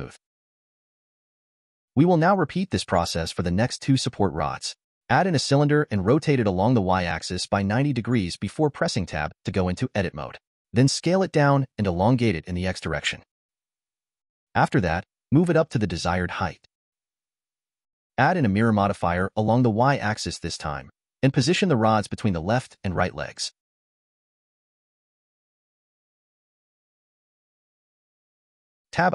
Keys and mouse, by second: 0.1 click, 1.5-4.0 middle drag, 5.1 shift+a, 6.7 r, 8.2 Tab, 8.6 s, 11.0 click, 11.7 click, 13.1 s, 15.7 g, 18.7 middle click, 20.0 click, 21.0-22.6 drag, 23.5 click, 23.8 click, 25.3 g, 27.8-28.9 middle drag.